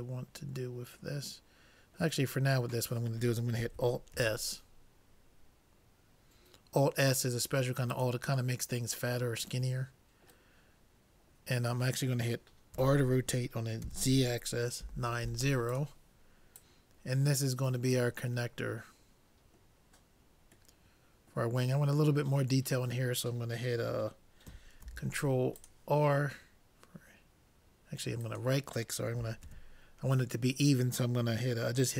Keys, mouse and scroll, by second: 4.2 alt+s, 8.6-10.4 middle drag, 11.4-13.4 middle drag, 12.8 r, 16.7-18.5 drag, 18.6-19.8 middle drag, 23.0 middle click, 24.9 ctrl+r, 29.5 ctrl+z.